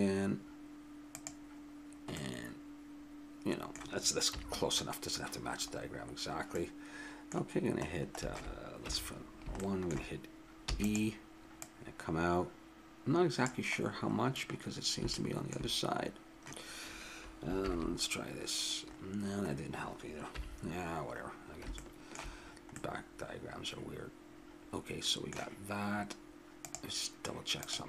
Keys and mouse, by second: 2.2-4.0 middle drag, 4.3 KP_3, 8.8 KP_1, 10.6 e, 11.6 click, 15.3-17.5 middle drag, 20.3 ctrl+KP_1, 23.3-24.5 middle drag.